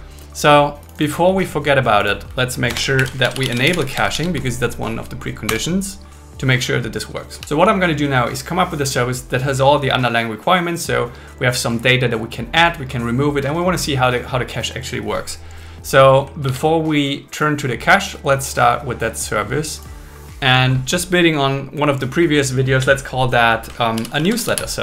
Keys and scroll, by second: 2.7 Return, 3.0 alt+l, 3.2 shift+e, 4.0 shift+c, 5.5 Return, 16.4 super+1, 24.0 shift+n.